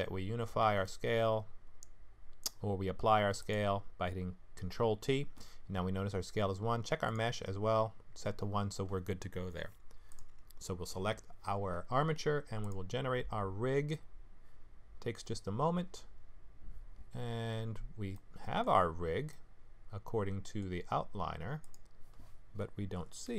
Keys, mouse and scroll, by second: 0.8 ctrl+a, 7.1 click, 12.6 click, 17.6-18.7 scroll down 2, 18.1 middle click, 18.7-19.3 scroll down 6, 19.3 middle click, 21.6 click.